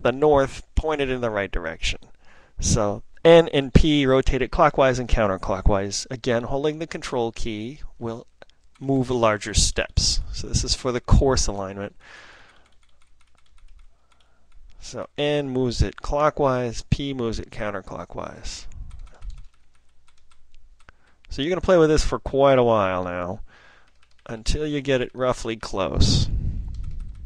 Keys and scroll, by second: 8.7 ctrl+n, 9.2 ctrl+n, 9.4 ctrl+n, 9.6 ctrl+n, 9.8 ctrl+n, 10.0 ctrl+n, 17.4 ctrl+p, 17.5 ctrl+p, 17.9 ctrl+p, 18.5 ctrl+p, 18.6 ctrl+p, 19.4 ctrl+n, 19.8 ctrl+n, 20.1 ctrl+n, 20.1 ctrl+n, 20.2 ctrl+n, 24.2 Page_Down, 24.4 Page_Down, 24.6 Page_Down, 24.7 Page_Down, 24.9 Page_Down, 25.1 Page_Down, 25.3 Page_Down.